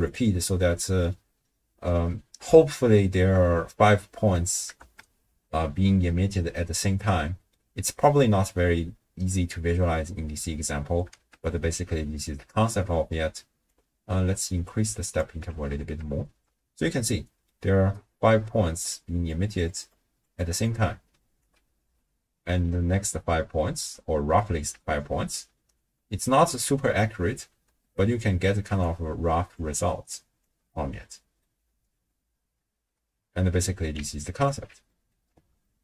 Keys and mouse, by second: 0.1 click, 4.8 shift+space, 6.0 space, 6.7-7.5 drag, 11.1 shift+space, 12.5 space, 13.7-15.2 drag, 15.5 shift+space, 16.4 space, 17.0-17.5 middle drag, 18.0 middle click, 18.7-24.6 typing, 18.9-19.5 drag, 20.7 click, 27.7-31.6 typing, 28.8 click, 29.8 click, 30.7-31.5 middle drag, 33.0 space, 34.0 d, 34.2 click, 34.5 d, 34.9 middle click, 34.9 d, 35.7-35.8 ctrl+drag.